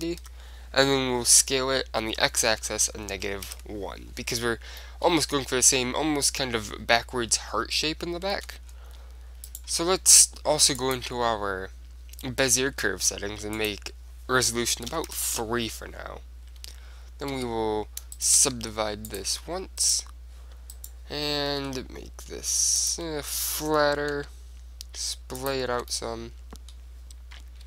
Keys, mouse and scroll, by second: 1.5 s, 5.0-8.5 middle drag, 8.5 Tab, 8.8 middle click, 9.5-11.3 right drag, 10.9-12.6 drag, 12.8-15.2 middle drag, 13.6-15.4 drag, 17.4 w, 18.3-22.8 right drag, 18.7 w, 21.6 r, 23.0-24.7 drag, 23.4-25.3 middle drag, 24.3 g, 25.6-27.5 drag, 25.8 Tab, 26.0 middle click, 27.5 middle click.